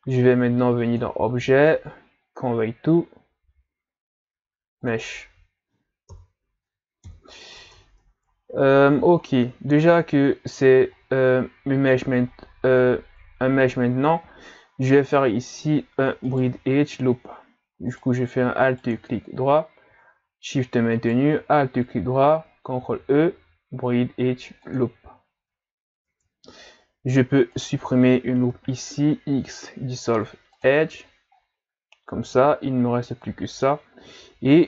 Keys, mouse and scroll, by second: 0.9-3.9 drag, 6.1 KP_3, 7.1 KP_1, 7.6 Tab, 8.1 ctrl+scroll down 2, 8.4-9.3 scroll up 4, 9.3-9.7 scroll down 3, 9.7-11.0 shift+scroll up 2, 12.3-13.0 scroll up 2, 13.0 ctrl+scroll down 1, 13.6 shift+scroll down 1, 14.0 scroll up 1, 15.1 alt+right click, 16.3 alt+shift+right click, 17.9 right click, 18.6 alt+right click, 20.9 alt+shift+right click, 22.8 ctrl+e, 25.4 Tab, 26.1 Tab, 26.3 scroll up 2, 27.5 alt+right click, 28.5 x, 31.4 scroll down 4, 31.9 scroll up 2, 32.4 Tab, 32.8 scroll down 5, 33.3-33.7 ctrl+scroll up 3.